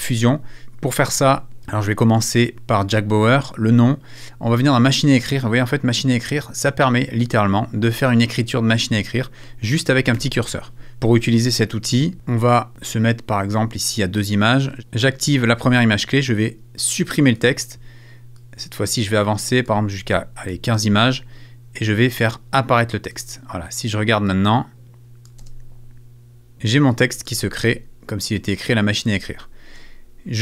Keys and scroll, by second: 10.1 super+z, 28.7 space.